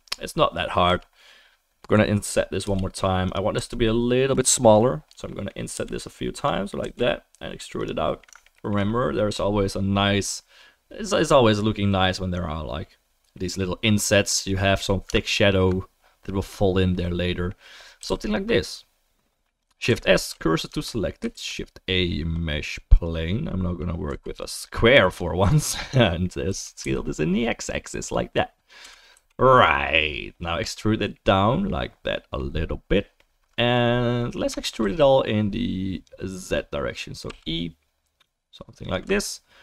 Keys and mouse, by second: 0.8 3, 2.6 i, 3.3-8.5 right drag, 3.5 e, 5.7 i, 6.8 e, 8.5 alt+click, 8.6 alt+right click, 8.8-15.3 middle drag, 15.3-17.2 alt+right drag, 17.2-18.7 middle drag, 18.0 g, 18.7-23.0 right drag, 19.9 shift+s, 20.7 Tab, 21.3 shift+a, 23.0-26.7 drag, 24.1 s, 26.5 s, 26.7-38.8 right drag, 28.8 s, 34.5 Tab, 34.8 a, 37.3 e, 38.8 alt+middle click, 39.2 alt+right click.